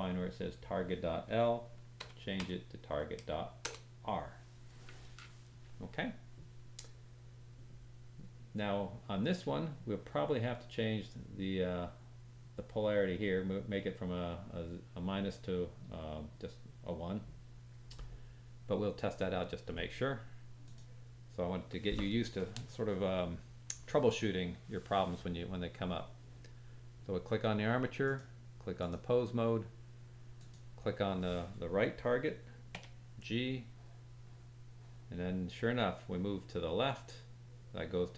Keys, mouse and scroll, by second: 20.6 click, 28.0-30.5 drag, 32.7 g.